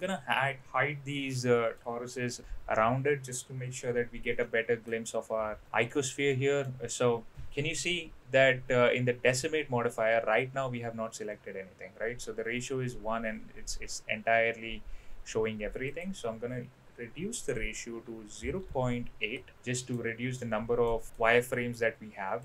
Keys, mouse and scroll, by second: 0.0 click, 2.4 h, 2.6 h, 4.4-4.8 middle drag, 5.6 middle click, 6.3 middle click, 15.9-19.4 drag, 19.6-19.9 middle drag, 20.4-20.8 middle drag, 21.1 middle click.